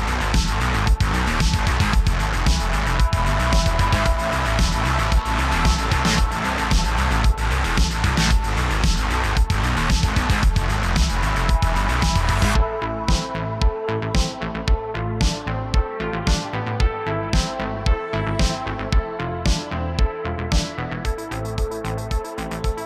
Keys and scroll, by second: 1.5 super+z, 5.7 d, 6.6 shift+f, 8.1-10.2 typing, 8.6 super+z, 9.9 super+z, 10.7 super+z, 12.5 shift+d, 12.6 shift+d, 14.9 super+z, 14.9 super+z, 15.0 super+z, 15.2 shift+d, 17.4 space, 17.7 shift+d, 18.6 space, 21.2 typing.